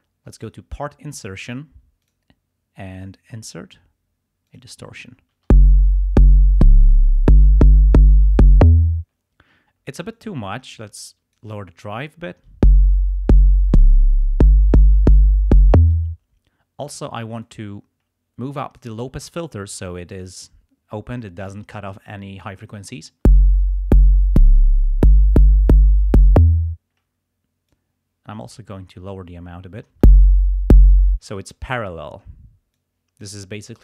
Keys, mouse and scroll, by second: 0.4 click, 2.0 click, 4.5 click, 5.4 space, 8.8 space, 10.2-11.5 drag, 12.5 space, 16.0 space, 17.4-19.0 drag, 23.2 space, 26.6 space, 27.7-29.1 drag, 29.9 space, 31.0 space, 32.7 click.